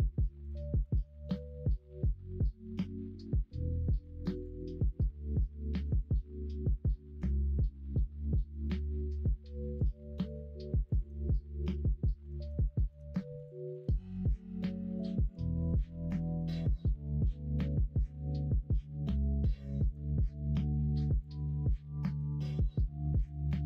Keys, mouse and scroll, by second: 0.6 middle click, 1.0 1, 1.2 click, 1.6-3.2 middle drag, 4.7 middle click, 4.9 middle click, 5.8 click, 7.3-8.7 drag, 9.7 2, 10.1 click, 10.8 click, 11.1 middle click, 12.2 f, 12.6 shift+middle click, 13.3 click, 13.7 shift+click, 14.8 middle click, 15.2 click, 15.5 shift+click, 15.9 shift+middle click, 16.4 middle click, 17.0-19.4 middle drag, 19.7 click, 21.1 click, 21.4 middle click, 22.2 click, 22.8 alt+z, 23.1 click.